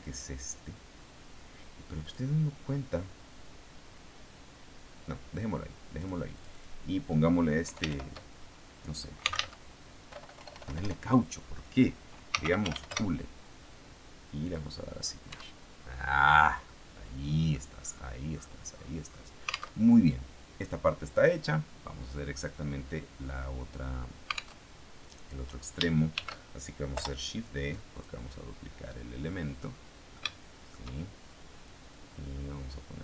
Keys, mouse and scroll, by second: 1.9 click, 5.9 click, 6.2 click, 7.5 Home, 8.0 shift+End, 8.9-10.3 typing, 11.9-13.1 typing, 14.3 click, 15.2 Tab, 16.5-17.6 middle drag, 17.6-18.1 scroll up 1, 18.1 scroll up 1, 18.8-19.7 scroll down 1, 19.7 alt+Tab, 24.5 alt+Tab, 26.0 shift+d, 26.9 Return, 27.8-29.7 drag, 30.0 shift+middle click, 31.6-33.0 drag.